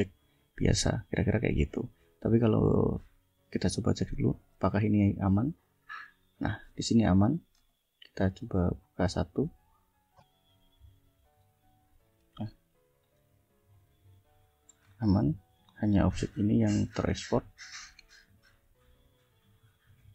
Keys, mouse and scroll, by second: 1.5 click, 4.2 click, 5.6 click, 7.2 click, 7.6 right click, 9.6 click, 11.9-13.2 drag, 13.5 click, 14.8 ctrl+scroll down 2, 15.5 ctrl+scroll up 2, 17.0 click, 18.1 click.